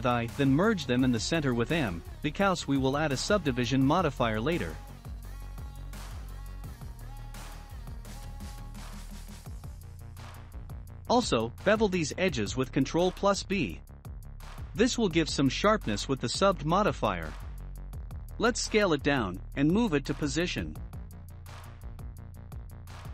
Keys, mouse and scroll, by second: 1.8 m, 4.1 shift+middle click, 4.7 scroll up 2, 5.4-8.6 drag, 8.6 scroll down 1, 9.1-9.6 scroll down 1, 9.6-11.1 drag, 11.1 ctrl+b, 15.2 Tab, 16.4 s, 18.5-20.6 shift+middle drag, 20.6-21.5 scroll up 5, 21.5 scroll up 1, 21.7-23.1 drag.